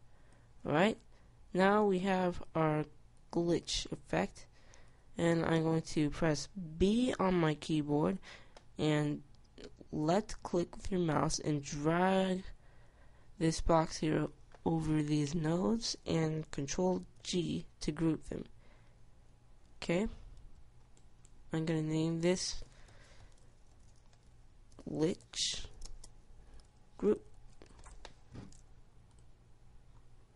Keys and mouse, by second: 17.4 ctrl+g, 20.6 Tab.